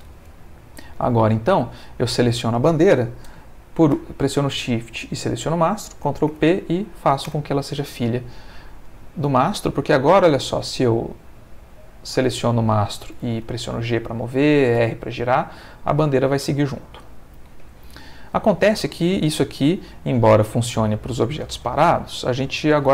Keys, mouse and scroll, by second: 0.9 click, 5.1 shift+click, 6.3 ctrl+p, 7.2 Return, 8.8 click, 9.6 r, 13.0 Escape, 13.5 g, 14.3 Escape, 14.8 r, 17.3 Escape, 17.9 ctrl+middle click.